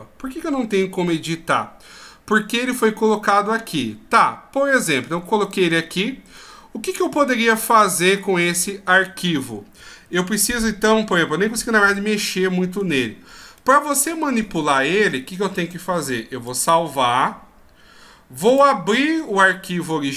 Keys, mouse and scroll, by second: 16.5 ctrl+q.